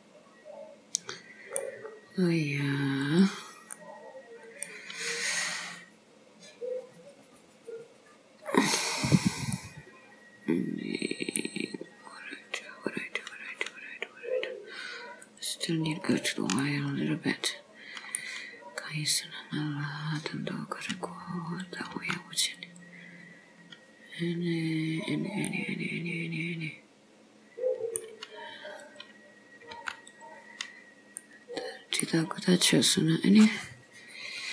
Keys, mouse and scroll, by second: 1.9 scroll up 3, 3.1 click, 3.9 middle click, 5.3 scroll down 2, 9.2-9.6 scroll down 1, 9.6 middle click, 15.2 click, 16.6 middle click, 18.7-19.5 scroll up 2, 19.5 scroll up 1, 21.7 click, 22.0 g, 23.7 scroll down 1, 24.5-24.8 scroll up 1, 25.1-25.5 scroll down 2, 25.5 middle click, 28.9 click, 29.8 g, 31.3 middle click, 33.2 click.